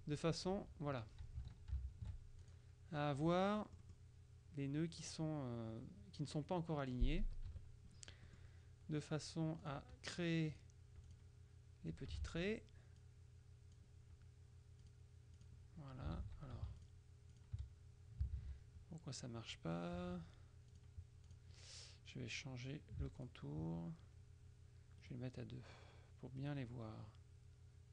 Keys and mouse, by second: 2.0 shift+z, 2.5 shift+click, 3.2 F2, 3.6 click, 6.6 click, 7.4 KP_Subtract, 8.4 click, 9.7 click, 10.6 click, 12.3 ctrl+z, 13.1 click, 14.9 click, 16.3 ctrl+z, 16.9 shift+click, 18.4 ctrl+z, 20.8 click, 23.3 shift+click, 25.1 right click, 26.5 right click.